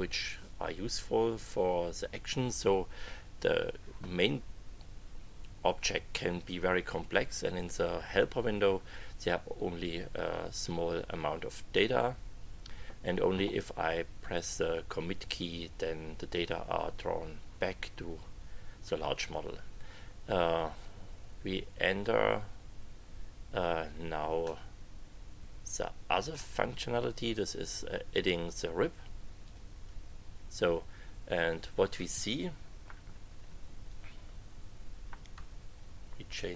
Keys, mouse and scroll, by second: 24.6-26.5 drag, 29.4 click, 33.9 click, 35.3 KP_2.